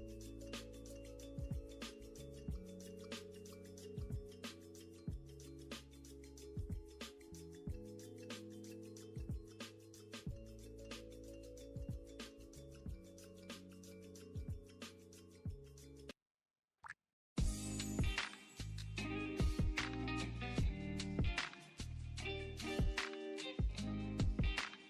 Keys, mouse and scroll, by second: 0.2 click, 0.4 scroll, 0.7 click, 1.0 right click, 1.5 Escape, 1.6-2.4 scroll, 2.6 Escape, 2.7 click, 3.0 click, 3.2 Escape, 3.8 click, 4.2 click, 4.6 ctrl+z, 4.9 Escape, 5.1 scroll, 5.2 click, 5.4 Delete, 6.4 click, 6.6 scroll, 7.0 click, 7.9 click, 8.1 click, 8.1 scroll down 2, 8.5 click, 8.6 click, 9.3 click, 9.7 click, 10.0 Escape, 10.1 click, 10.1 click, 10.1-11.4 typing, 11.5 scroll down 1, 12.0 click, 12.3 click, 12.3 Escape, 12.4-12.8 scroll up 6, 12.8 scroll down 1, 12.9 scroll down 6, 13.5 click, 13.5 scroll, 13.9 click, 14.0 Escape, 14.1 click, 14.2 click, 14.3-17.1 typing, 16.6 click, 16.7 click, 17.2 click, 17.4 click, 17.8 click, 18.0 click, 18.3 click, 18.7 click, 19.3 click, 19.4 click, 19.8 click, 20.2 click, 20.8 click, 20.9 click, 21.1-21.4 scroll down 4, 21.5 click, 21.8 d, 23.3 click, 23.6 click, 23.9-24.2 scroll, 24.2 click, 24.6 click.